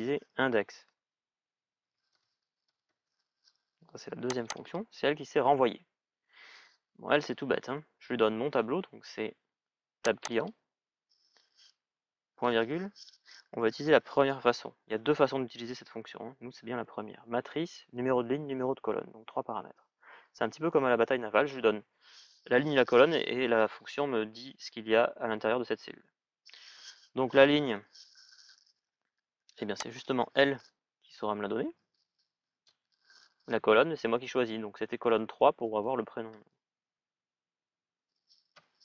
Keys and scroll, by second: 1.6-3.1 typing, 36.7 shift+".